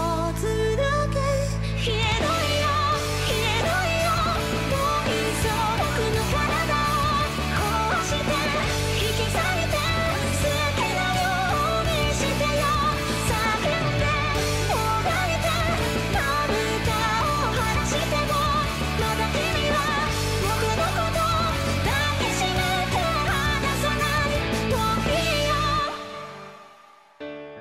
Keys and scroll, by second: 0.3 ctrl+z, 0.5 ctrl+z, 0.5 ctrl+z, 0.8 ctrl+z, 21.2 ctrl+z, 21.5 ctrl+z, 21.9 ctrl+z, 22.4 ctrl+z, 22.5 ctrl+z.